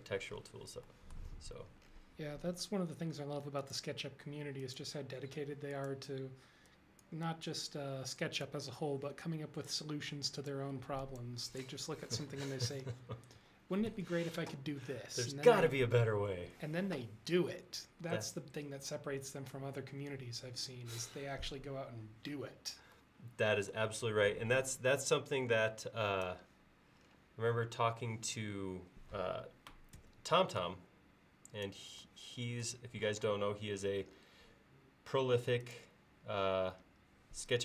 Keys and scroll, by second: 2.8 l, 5.1 e, 30.0 space, 33.2 m.